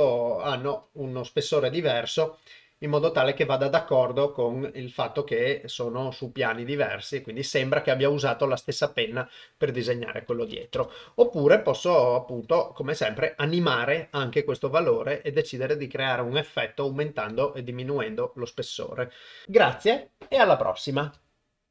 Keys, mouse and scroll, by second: 9.8 click.